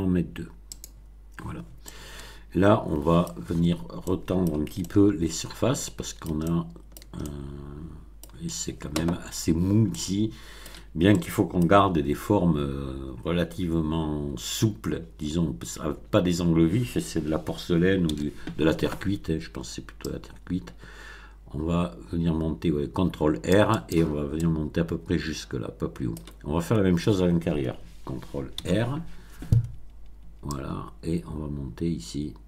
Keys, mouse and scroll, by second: 0.7 click, 1.8-3.4 middle drag, 3.6 scroll up 2, 4.0-4.6 middle drag, 4.7-6.4 shift+middle drag, 6.6 shift+middle click, 7.3-8.3 shift+middle drag, 9.9-10.8 middle drag, 11.1-11.7 middle drag, 11.9 Tab, 13.2 Tab, 15.8 Tab, 18.0 ctrl+r, 20.0-24.0 drag, 24.3-26.3 middle drag, 28.5 ctrl+r, 30.5-32.4 drag.